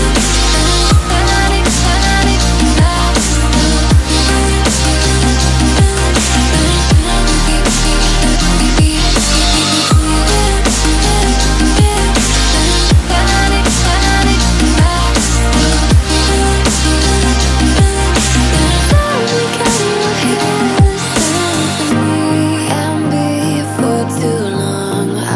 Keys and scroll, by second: 20.8 ctrl+c.